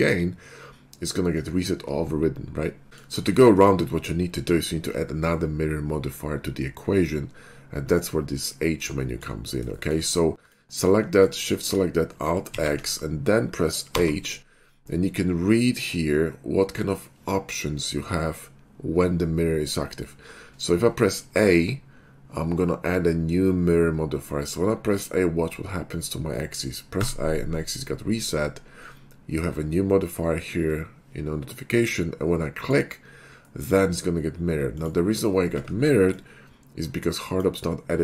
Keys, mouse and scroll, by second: 2.9 middle click, 3.3 shift+middle click, 9.1 shift+middle click, 10.4 click, 11.2 shift+click, 12.4 alt+x, 13.9 h, 27.0 a, 32.6 click, 33.4-33.7 middle drag, 34.7 click, 35.6 ctrl+`, 36.1-37.4 drag.